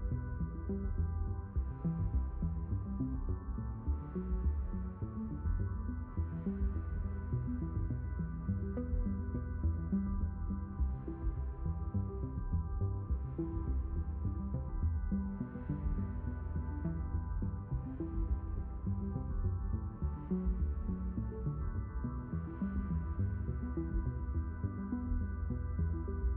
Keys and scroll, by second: 10.0 6, 15.1 q, 16.0 ctrl+z, 18.7 ctrl+z, 21.3 s, 25.0 shift+n.